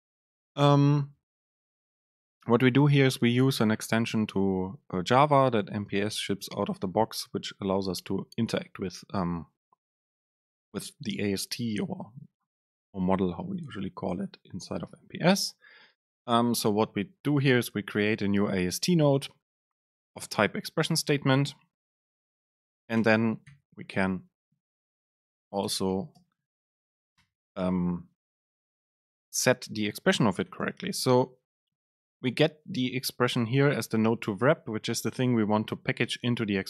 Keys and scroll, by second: 23.1 Return, 24.9 super+space.